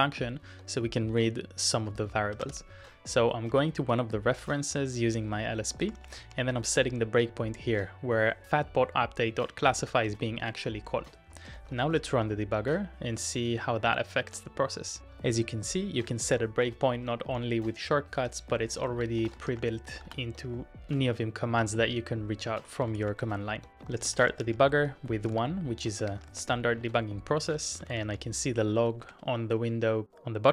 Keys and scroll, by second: 2.2-3.0 typing, 5.7-8.7 typing, 9.9 shift+;, 11.1-12.2 typing, 15.0 Tab, 15.2 Tab, 15.4 Tab, 15.6 Tab, 16.0 Tab, 18.2 Return, 19.2 shift+;, 19.5 Up, 20.1 Return, 22.7-29.0 typing, 29.1 Return.